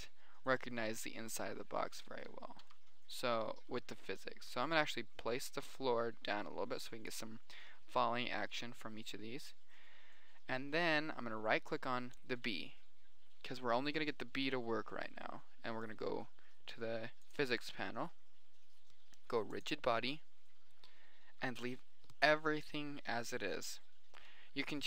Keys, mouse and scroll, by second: 3.0 g, 12.5-13.9 right drag, 14.5-16.3 middle drag, 18.1-19.2 drag, 19.3 click.